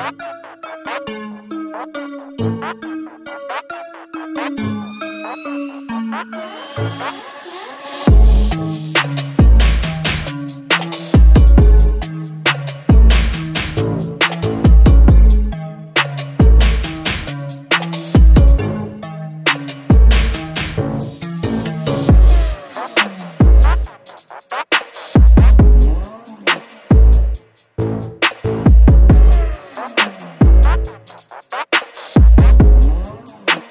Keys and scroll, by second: 6.0 Tab, 7.1 typing, 8.2 typing, 18.5 s, 20.2 Tab.